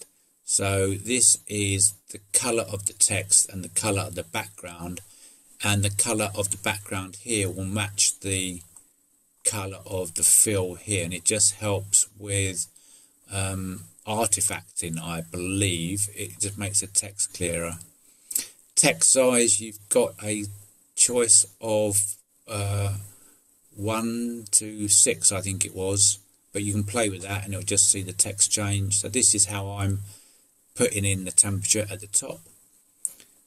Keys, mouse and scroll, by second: 8.1 click, 9.5 middle click, 10.9 click, 11.5-12.7 drag, 14.8 click, 15.0 middle click, 15.6 middle click, 17.1 middle click, 28.5 middle click, 32.8 middle click.